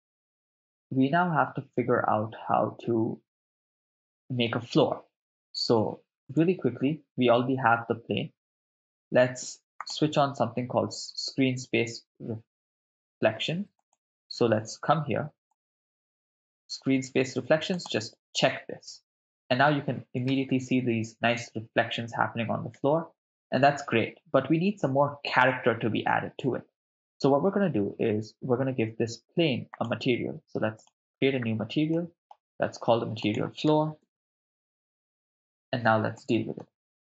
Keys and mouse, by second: 3.3 shift+space, 6.5-7.6 right drag, 9.8 click, 13.8 click, 15.5 click, 17.9 click, 20.4 shift+space, 22.8 shift+space, 29.7 click, 30.8-31.1 drag, 31.9 middle click, 33.2-34.8 drag, 34.4 o, 36.2 middle click.